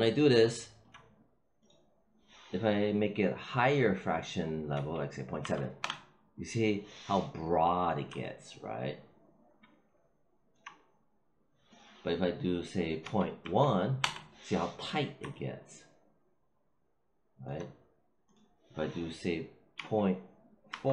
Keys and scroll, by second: 4.6 ., 5.3 7, 5.7 Return, 12.9 ., 13.3 1, 13.9 Return, 19.7 ., 20.6 4.